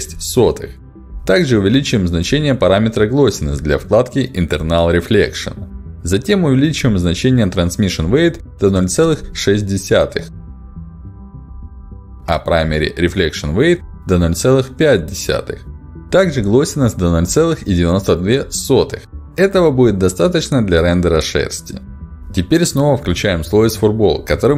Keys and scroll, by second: 3.6 BackSpace, 6.5 7, 6.6 Return, 11.7 BackSpace, 11.9 6, 11.9 Return, 13.9 BackSpace, 14.1 5, 14.1 Return, 16.4 BackSpace, 17.3 9, 18.4 2, 18.5 Return.